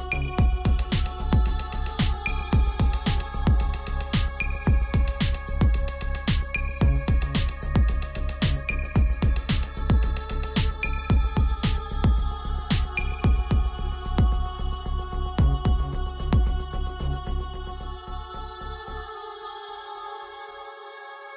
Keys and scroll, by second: 13.4 shift+Caps_Lock, 14.1 shift+v.